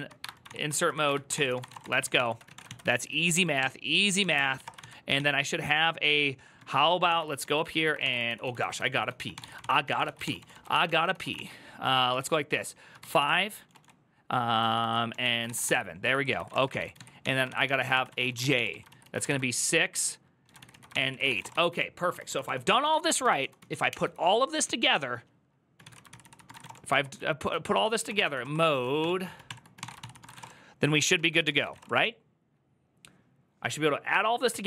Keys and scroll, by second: 0.0-4.9 typing, 6.6-19.0 typing, 12.9 ctrl+c, 14.4 ctrl+a, 14.6 ctrl+a, 20.2 ctrl+c, 20.2-23.2 typing, 20.4 ctrl+a, 25.4-31.5 typing, 31.0 ctrl+^, 31.2 ctrl+c, 31.6 Return.